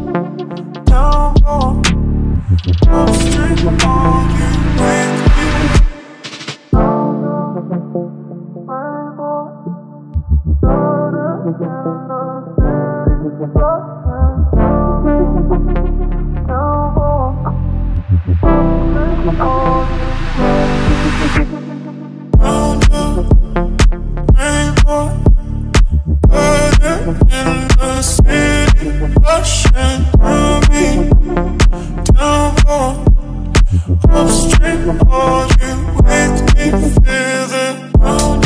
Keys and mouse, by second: 18.2-24.4 drag, 28.6 KP_Decimal, 34.0-38.2 ctrl+middle drag.